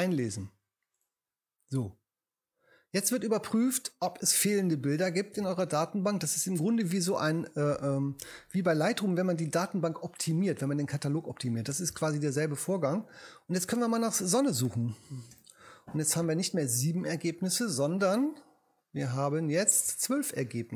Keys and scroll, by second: 14.7 s, 15.3 n.